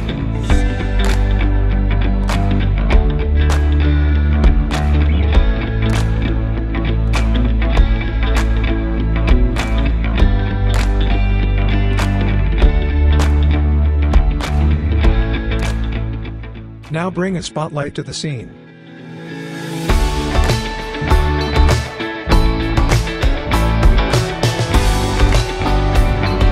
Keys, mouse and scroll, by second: 1.5-1.9 scroll down 1, 1.9-2.4 scroll up 1, 2.8-3.2 scroll down 1, 3.2-3.9 middle click, 3.7 scroll down 1, 4.7 click, 8.5-9.3 scroll down 1, 9.3 scroll up 1, 9.8-11.0 alt+drag, 11.1-11.4 scroll down 1, 11.4-12.0 middle drag, 12.9 click, 16.1 click, 16.9 scroll up 1, 18.2-20.4 drag, 21.0 r, 21.5-22.5 drag, 23.3 e, 24.6-26.5 typing, 24.9 click.